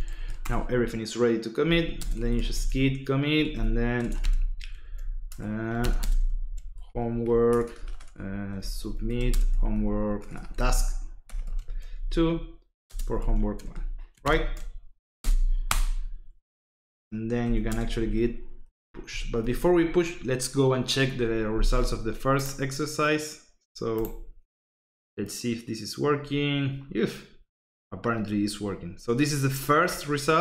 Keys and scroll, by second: 0.0-15.2 typing, 15.6 Return, 17.0-19.3 typing.